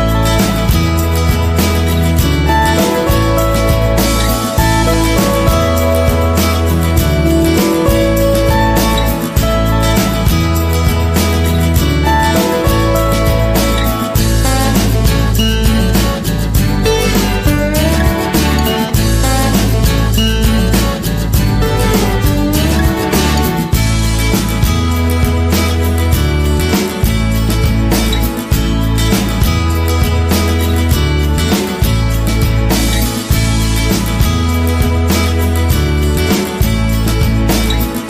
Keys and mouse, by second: 0.2 g, 1.8 Tab, 2.9-3.2 middle drag, 3.5-4.0 middle drag, 4.3 Tab, 4.5 middle click, 5.7 g, 6.6 Tab, 7.6 Tab, 9.9 middle click, 10.7 g, 11.8 middle click, 12.7 right click, 13.0 g, 14.0 middle click, 15.1 middle click, 17.5 middle click, 18.0 middle click, 18.4 middle click, 19.2 right click, 19.4 middle click, 19.9 g, 21.3 Tab, 21.8-22.2 middle drag, 22.4 middle drag, 22.9 right click, 23.5-23.9 middle drag, 24.0 shift+middle click, 24.5-24.9 middle drag, 25.0 KP_3, 25.3 shift+middle drag, 26.3 right drag, 27.9 Tab, 28.2 shift+middle click, 28.9-29.3 middle drag, 31.4 shift+right click, 31.7 KP_3, 32.7 e, 34.2 s, 36.7 g, 37.7 Tab.